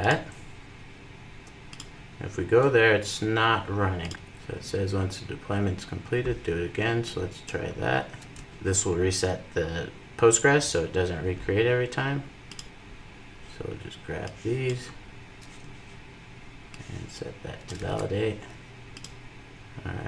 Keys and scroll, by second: 12.6 super+v, 17.5 super+v.